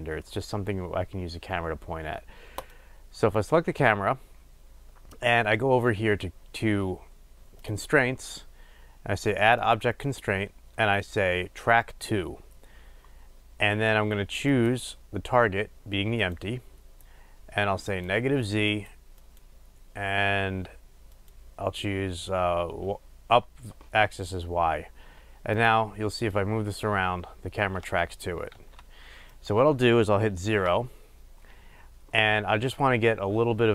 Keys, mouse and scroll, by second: 2.8 click, 12.2-18.3 drag, 21.3-25.7 drag, 26.4-29.5 drag, 28.6 ctrl+z, 30.6 KP_0.